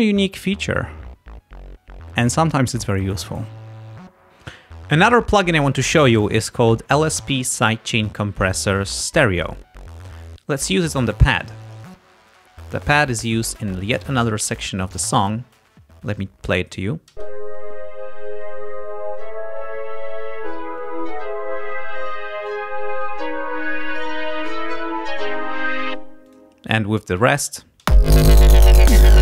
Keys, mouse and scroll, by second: 11.4 click, 12.2 ctrl+scroll down 2, 13.9 click, 14.6 ctrl+scroll up 2, 15.8 click, 17.2 space, 26.0 space, 26.3 click, 27.9 space.